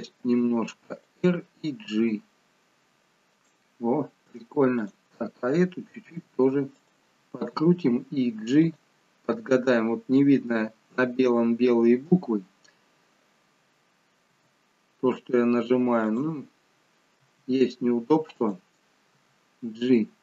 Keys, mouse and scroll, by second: 0.2 r, 1.8 g, 4.8 click, 6.0 r, 7.5 g, 14.2 e, 17.2 r, 19.1 g.